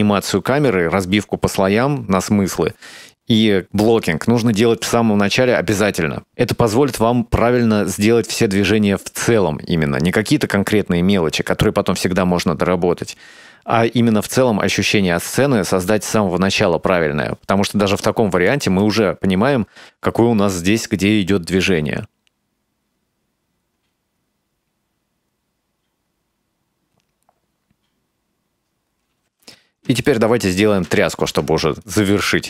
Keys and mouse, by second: 18.0 click, 18.4 click, 18.7 space, 29.3 space, 30.1 middle click, 31.0 middle click, 31.8-32.4 drag.